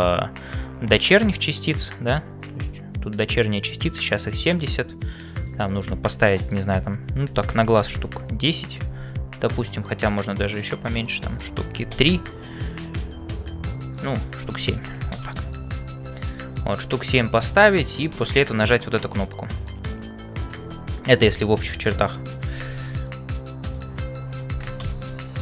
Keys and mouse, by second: 0.0-25.4 typing, 1.3 click, 5.1-9.0 drag, 10.7-13.0 drag, 14.1-16.0 drag, 23.6-25.4 drag.